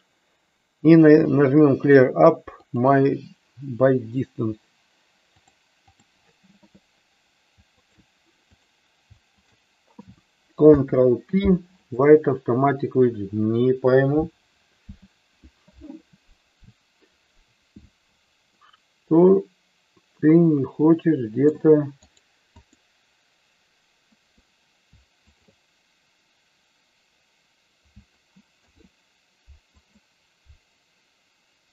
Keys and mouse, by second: 5.5 click, 7.7 shift+click, 8.5 click, 10.6 ctrl+p, 18.6-21.7 middle drag, 25.2 shift+click, 28.6 ctrl+p.